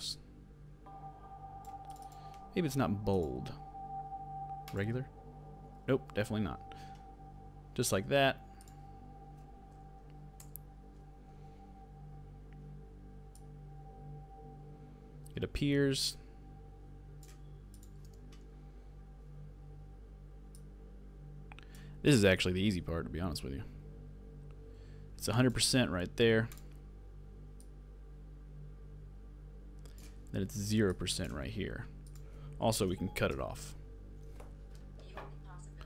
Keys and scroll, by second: 6.1 super+z, 33.3 alt+[.